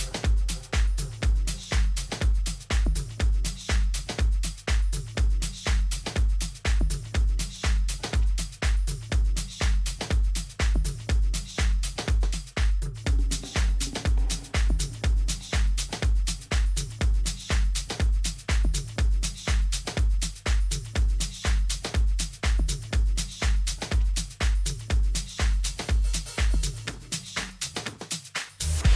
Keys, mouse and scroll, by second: 0.5-2.6 middle drag, 2.6 KP_3, 4.3 z, 5.5 z, 8.0 middle click, 10.5 right click, 11.1 Tab, 15.4-17.0 typing, 22.9 b, 24.9 g.